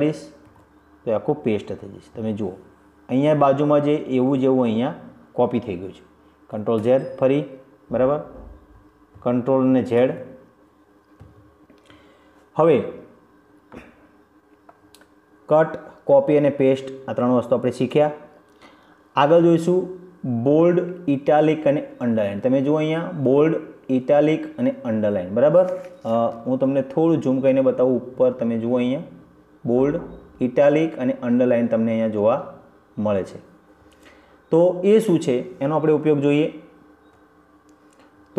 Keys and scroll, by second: 1.6 ctrl+v, 8.0 ctrl+shift+z, 11.2 ctrl+z.